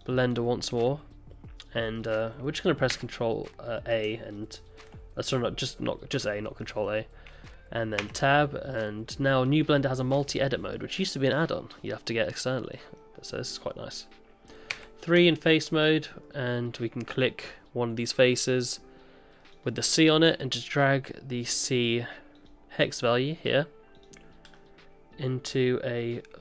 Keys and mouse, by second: 2.0 middle drag, 2.9 a, 4.3-4.8 shift+drag, 6.6 middle drag, 8.1 Tab, 11.9 middle click, 12.7 middle click, 14.7 3, 15.8 middle click.